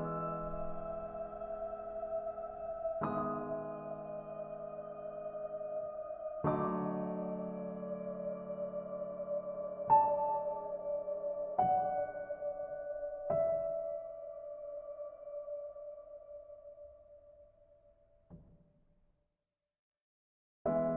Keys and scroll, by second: 4.0 ctrl+space.